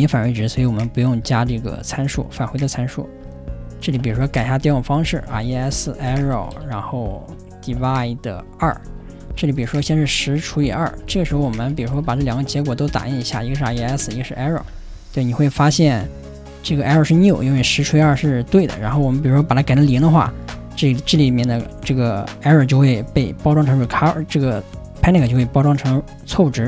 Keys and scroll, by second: 1.1 ,, 2.4 z, 4.3 ,, 5.3 ,, 9.7 ,, 13.6 ,, 14.6 ,, 18.8 r.